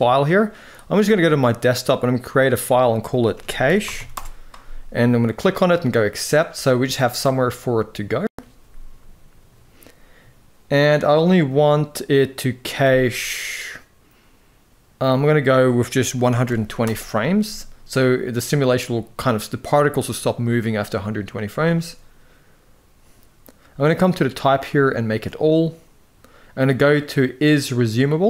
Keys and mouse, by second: 12.6-18.0 drag, 23.7-24.8 drag, 27.5 click.